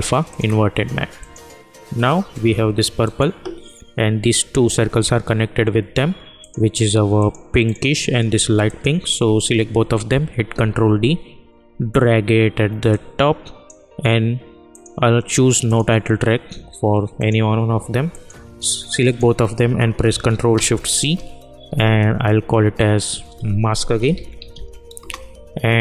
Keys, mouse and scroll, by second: 6.3 click, 6.5 click, 8.6 ctrl+click, 10.5 ctrl+d, 12.9-14.7 drag, 19.0 shift+click, 20.9 ctrl+shift+c, 23.8-25.0 typing.